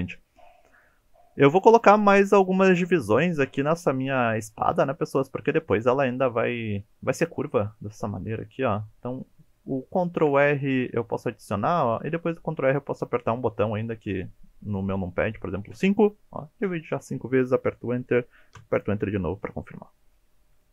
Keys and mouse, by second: 10.2 ctrl+r, 18.6 KP_Enter.